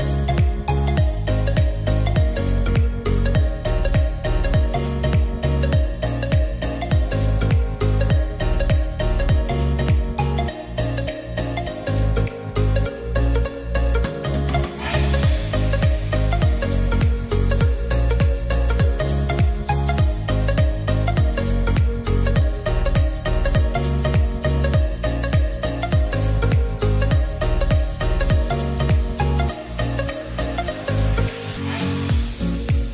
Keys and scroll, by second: 0.0-0.7 typing, 9.9 ctrl+a, 23.1 Delete.